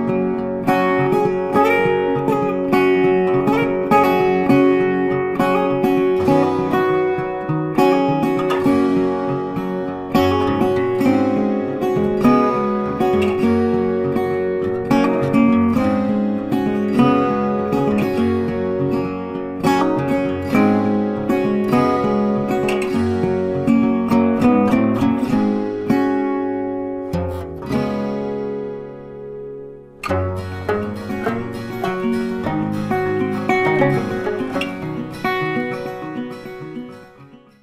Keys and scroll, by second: 1.2 ctrl+a, 3.5 ctrl+d, 11.4 ctrl+alt+shift+e, 15.6 ctrl+a, 17.8 ctrl+d.